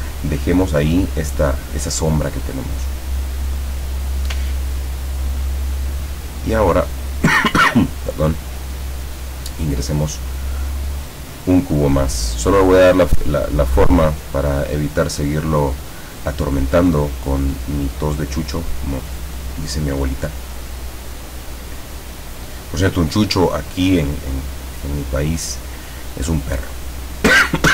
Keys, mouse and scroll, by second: 3.0 click, 4.7-5.0 ctrl+scroll down 2, 8.6 click, 12.4-19.9 drag, 21.4 click, 22.4 click.